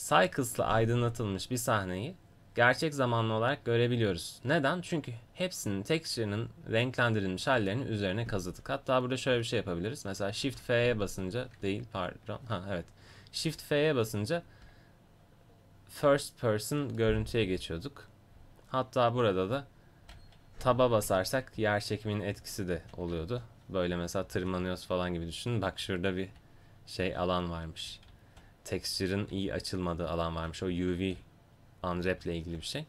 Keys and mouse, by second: 0.8 middle click, 1.0 middle click, 1.1 middle click, 10.5 shift+f.